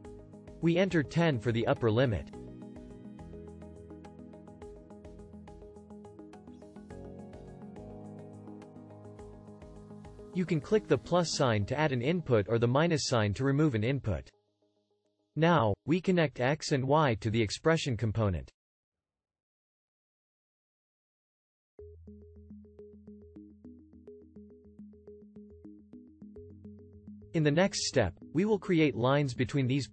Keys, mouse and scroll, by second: 24.1-25.5 right drag.